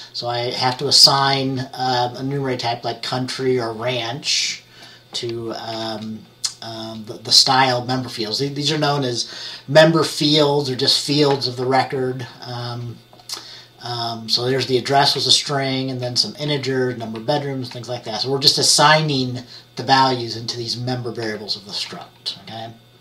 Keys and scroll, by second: 5.8 F10, 15.3 F10, 16.1 F10, 16.6 F10, 17.3 F10, 21.3 F10, 22.0 F10.